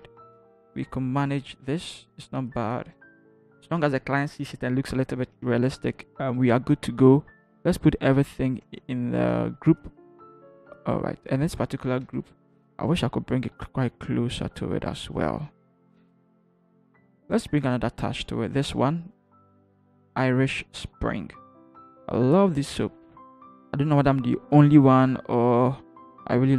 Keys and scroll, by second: 0.4 ctrl+0, 1.2 ctrl+-, 2.9 v, 3.7 ctrl+-, 9.1 ctrl+g, 12.8 Right, 13.4 Right.